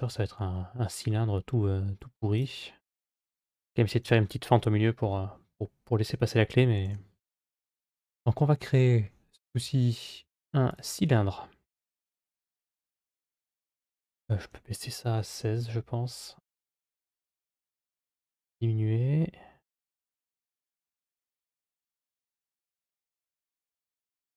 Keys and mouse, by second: 6.7 shift+a, 12.2 r, 14.0-16.1 drag, 17.3-21.5 drag, 22.1-24.3 drag.